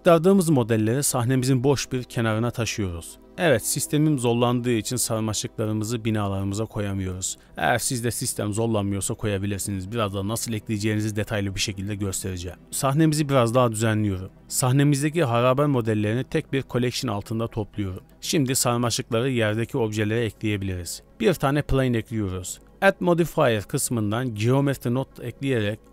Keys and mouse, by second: 0.0 g, 2.1-2.9 shift+middle drag, 3.1 z, 3.2 a, 4.1 e, 6.0 middle click, 7.3 ctrl+z, 7.8 ctrl+z, 8.9 e, 11.3 middle drag, 11.8 middle drag, 12.2 middle click, 12.3 click, 13.9 shift+middle drag, 15.3 m, 17.4-18.7 middle drag, 19.2 middle click, 21.0 alt+a, 22.2 Tab, 23.7 click, 24.4-25.5 drag.